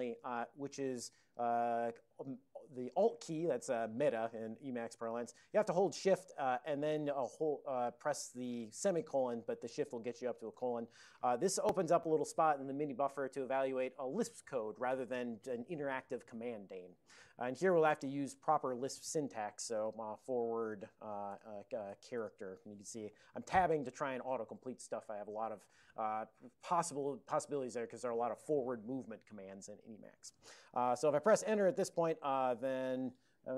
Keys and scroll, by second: 10.6 alt+:, 19.7-22.5 typing.